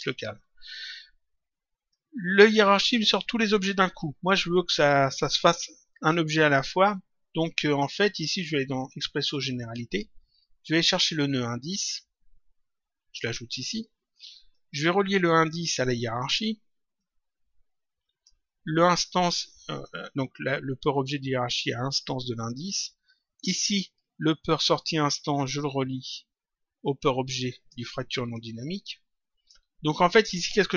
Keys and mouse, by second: 1.9 click, 9.6 click, 11.9 click, 14.5 click, 16.9 click, 22.5 click, 25.3 click, 28.3 click.